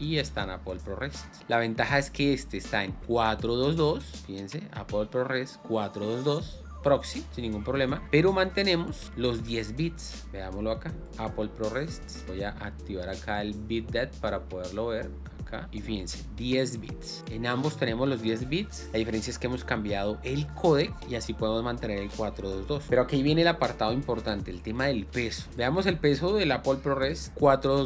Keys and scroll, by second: 25.1 alt+Tab.